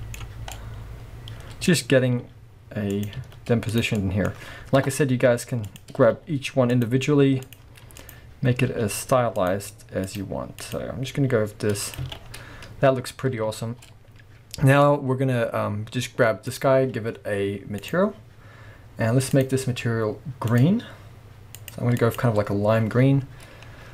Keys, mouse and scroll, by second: 2.2 r, 3.0 click, 3.2 z, 3.9-5.7 middle drag, 4.8 KP_0, 5.3-5.7 scroll up 2, 5.7 click, 6.1 r, 6.8 click, 7.0 g, 8.0 click, 8.7 r, 9.4 click, 9.5 g, 10.6 click, 11.2 g, 12.0 click, 12.1 alt+a, 12.2 scroll down 1, 13.6-16.5 shift+middle drag, 13.9 scroll down 1, 16.5 click, 17.8 click, 19.3-20.6 drag, 23.1-23.6 scroll down 1, 23.6-23.9 scroll up 1.